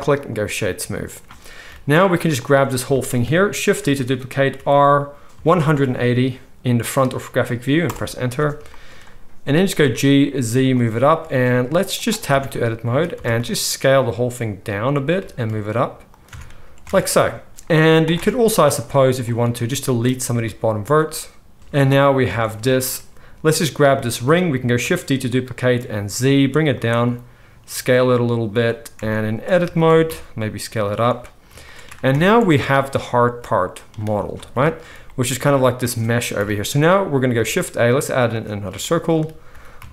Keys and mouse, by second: 1.6 KP_1, 2.3 click, 2.3 middle click, 6.0 shift+d, 8.6 shift+click, 9.3-12.0 right drag, 9.3 g, 11.1 s, 12.0-15.3 middle drag, 12.3 Tab, 12.8 a, 13.1 s, 15.1 g, 16.2-19.2 middle drag, 16.4 Tab, 16.8 alt+a, 18.3 Tab, 18.6 z, 19.2-23.5 drag, 20.3 x, 22.2 alt+a, 23.5-23.8 middle drag, 24.0-33.3 shift+middle drag, 24.8 shift+d, 27.0 s, 28.9 Tab, 29.5 a, 29.8 s, 32.0 Tab, 32.5 alt+a, 33.3-34.3 drag, 34.3 middle click, 34.6-39.9 shift+middle drag, 36.3 KP_1, 37.4 shift+a, 39.4 g.